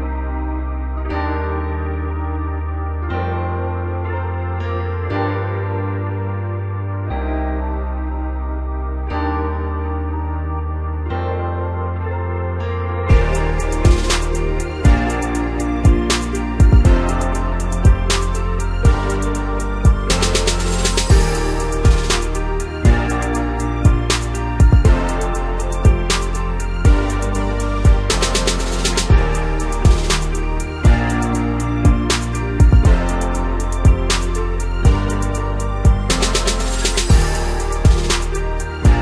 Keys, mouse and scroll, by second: 0.4 s, 5.2 scroll down 4, 5.5 middle click, 6.2 scroll down 1, 6.4 Tab, 7.6 click, 8.1-8.5 scroll down 3, 8.5-9.0 middle drag, 9.0-10.0 scroll up 2, 10.0 click, 10.4 scroll down 2, 10.6-12.6 middle drag, 12.6 KP_1, 13.6 ctrl+KP_6, 14.1 KP_6, 14.7 ctrl+KP_2, 14.8 ctrl+KP_2, 15.7-16.0 scroll down 3, 16.0-17.2 middle drag, 17.2 click, 17.5-18.4 scroll up 2, 18.4-19.6 scroll up 2, 19.6 shift+click, 20.3 shift+click, 20.8 scroll down 1, 21.4 KP_1, 21.9 Tab, 23.3 click, 24.2 1, 25.0 click, 27.1-27.5 scroll up 1, 27.5 Tab, 28.3 shift+click, 28.9-29.2 scroll down 2, 29.2 Tab, 30.1 click, 31.3-32.1 scroll up 3, 32.1 scroll up 1, 32.3 g, 35.9 click, 36.3 scroll down 2, 36.5 middle click, 36.9-37.2 scroll up 1, 37.2 Tab, 38.0 click.